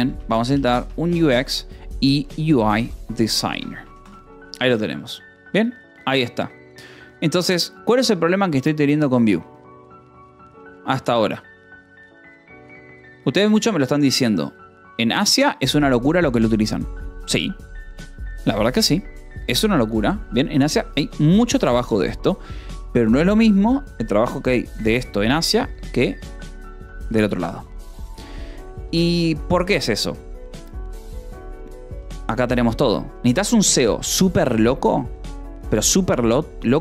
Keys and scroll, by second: 0.0-1.0 typing, 2.4-4.0 typing, 4.5 ctrl+s, 9.4 k, 11.0 j, 12.9 j, 15.6 k, 19.3 j, 20.2 k, 21.5 j, 21.9 k, 29.4 k, 33.1 j.